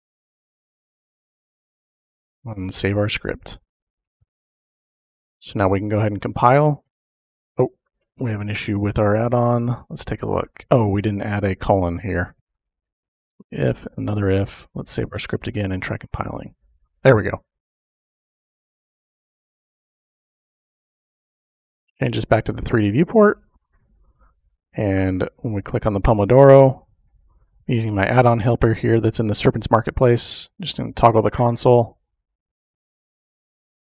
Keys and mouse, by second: 1.2 click, 2.0 BackSpace, 5.9-7.0 drag, 5.9 typing, 12.3 shift+;, 12.4 Insert, 15.1 click, 16.3 click, 21.7-22.7 drag, 25.8 click, 28.0 click.